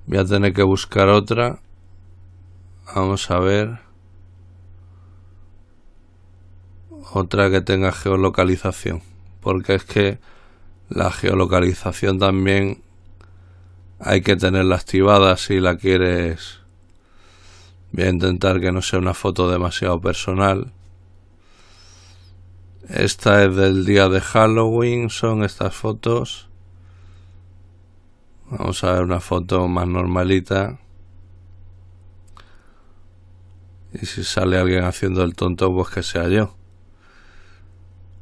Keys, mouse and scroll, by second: 0.8 click, 1.6-38.2 drag.